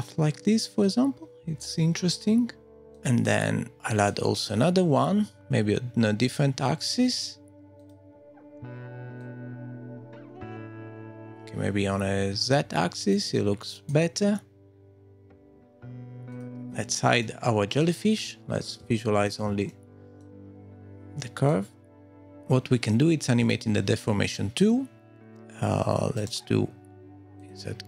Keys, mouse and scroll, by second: 2.9 click, 5.3-6.1 scroll down 1, 6.1 scroll down 3, 6.2 click, 9.2 click, 11.3 middle click, 13.1 click, 14.4 middle click, 16.0 scroll up 2, 16.3 click, 17.2 middle click, 18.0 scroll down 2, 19.0 shift+middle click, 19.6 middle click, 21.4 click, 23.4 click, 26.1 right click.